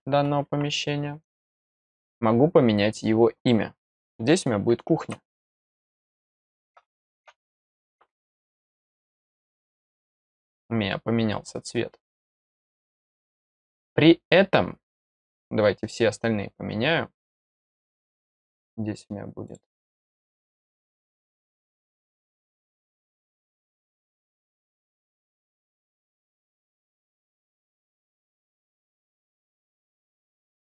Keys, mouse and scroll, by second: 1.2 click, 9.5 click, 17.4 click, 19.4 click, 20.1 click, 21.3 click, 23.4 click, 24.2 click, 25.9 click, 28.1 click, 28.9 click, 30.2 click.